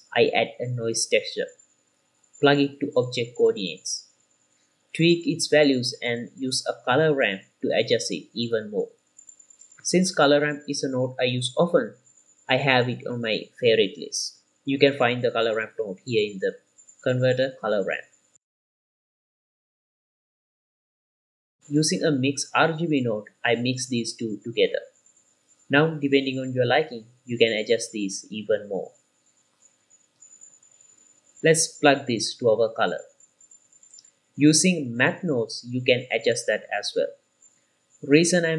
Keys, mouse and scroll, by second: 3.1 click, 4.7-5.9 drag, 6.0 middle click, 6.5 click, 6.9 click, 7.8 KP_0, 8.2 click, 9.4 click, 9.5 middle click, 10.8 q, 15.8 shift+a, 21.5 middle click, 21.5 scroll down 1, 21.5 click, 21.7 q, 24.4-25.1 drag, 25.3 middle click, 25.6 click, 25.8 click, 26.0 middle click, 26.7 ctrl+shift+click, 26.7 scroll up 1, 26.8 middle click, 27.4 ctrl+shift+click, 28.2-28.7 middle drag, 28.2-28.7 scroll up 2, 28.8-29.6 scroll up 1, 29.7 middle click, 29.7 scroll down 1, 29.9 q, 30.0 middle click, 31.4 click, 33.1-34.8 middle drag, 34.8 click, 35.1 shift+d, 35.6 click, 36.5 click, 38.2-38.5 drag.